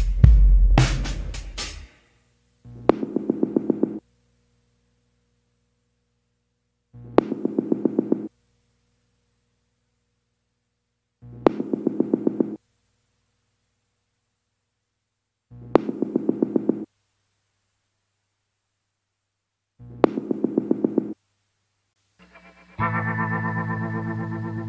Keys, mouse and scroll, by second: 2.5 scroll down 1, 3.7 scroll up 1, 11.8 scroll up 1.